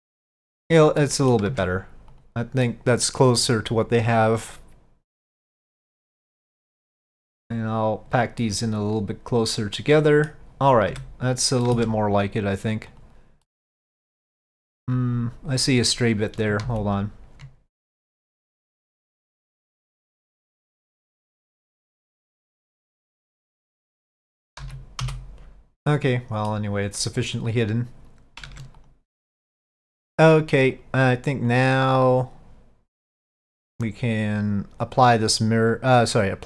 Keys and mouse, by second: 1.2 middle click, 1.6 Tab, 2.2 click, 2.8 middle click, 5.6-8.2 drag, 8.6-10.4 middle drag, 11.0 Tab, 11.7 middle click, 13.0 click, 13.5-14.9 middle drag, 16.8 ctrl+z, 21.0 click, 21.4-24.4 middle drag, 25.9 middle click, 28.6 Tab, 28.9-31.7 drag, 35.3-36.4 drag.